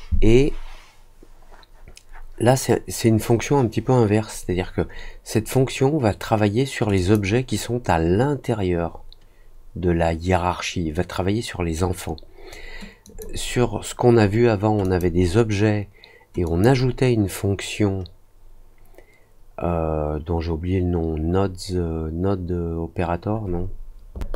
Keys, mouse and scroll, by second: 6.9 click, 13.0 click, 14.8 click, 16.4 click.